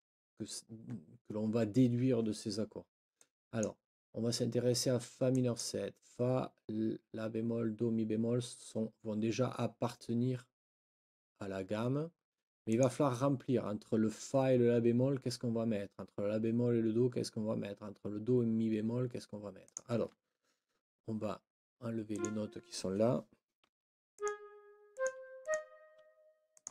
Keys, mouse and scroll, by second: 3.1 click, 5.3 click, 12.7 click, 19.7 click, 22.1 click, 23.6 Delete, 24.1 click, 24.4 Delete, 24.9 click, 25.2 Delete, 25.9 Delete, 26.5 click.